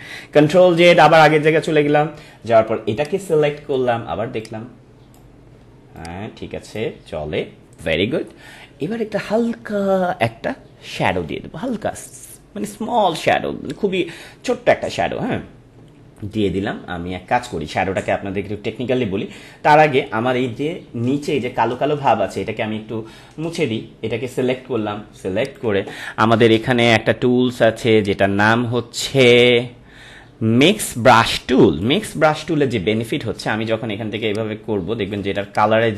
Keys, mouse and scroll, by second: 0.8 ctrl+z, 2.9-9.2 drag, 14.7 click, 14.8 ctrl+=, 20.5 ctrl+=, 23.5 click, 25.4 ctrl+click, 28.0-34.2 drag, 34.2-35.9 drag.